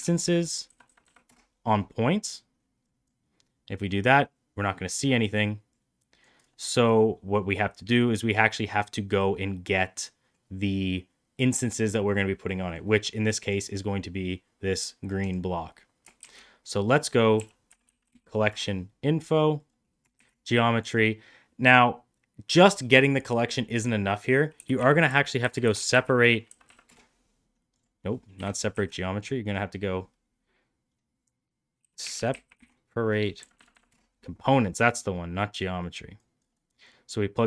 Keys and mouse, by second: 0.7 Down, 3.7-4.5 middle drag, 5.7 click, 6.7-8.0 drag, 8.7 middle click, 12.5 middle drag, 15.1 click, 16.1 shift+a, 20.1 shift+a, 26.5 Down, 28.2 Delete, 28.6 shift+a, 33.4 Down, 33.6 Down, 35.7 click, 36.7-37.4 drag.